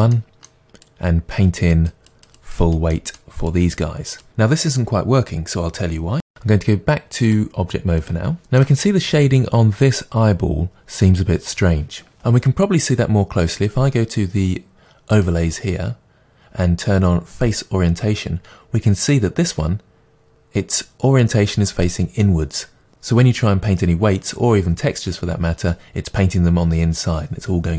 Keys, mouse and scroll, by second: 0.1-0.9 middle drag, 0.9-2.9 drag, 2.9-3.5 middle drag, 3.5-6.2 drag, 6.2-7.3 middle drag, 7.3-8.4 drag, 8.4-15.1 shift+middle drag, 15.1-27.7 drag.